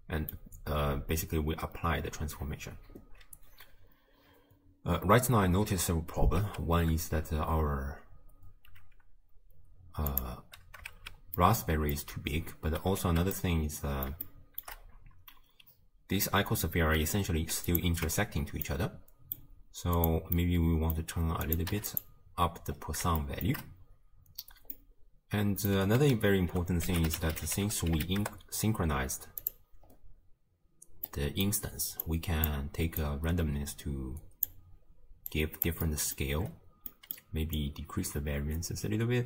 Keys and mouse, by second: 6.5 space, 8.8 space, 10.1 click, 11.0 shift+space, 11.6 click, 12.2 space, 12.7 space, 13.4-14.1 drag, 14.3-14.7 shift+drag, 17.7 click, 18.1 Tab, 18.8 click, 20.0 click, 20.4 click, 21.5 click, 23.4 shift+click, 24.8-25.9 drag, 26.4 ctrl+a, 28.0 s, 31.1 click, 32.1 click, 33.0-34.6 drag, 35.4 click, 36.0 click, 37.1 click, 37.6-39.2 drag.